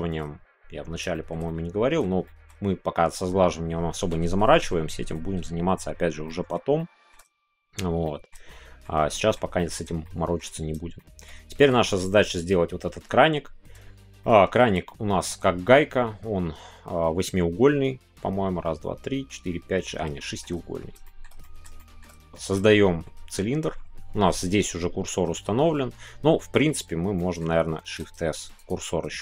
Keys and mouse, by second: 1.1 shift+middle click, 1.4 middle click, 2.2 shift+middle click, 6.2-6.6 middle drag, 6.7-7.1 shift+middle drag, 8.0 middle click, 8.4 shift+middle click, 9.1 shift+middle click, 9.5-9.8 middle drag, 10.0 shift+middle click, 10.9 shift+middle click, 14.2 shift+middle click, 14.8 shift+middle click, 20.2 shift+middle click, 21.0 shift+middle click, 21.4 middle click, 21.7 shift+middle click, 22.3-23.0 shift+middle drag, 25.3-26.7 middle drag, 27.1 middle click, 27.8 shift+s.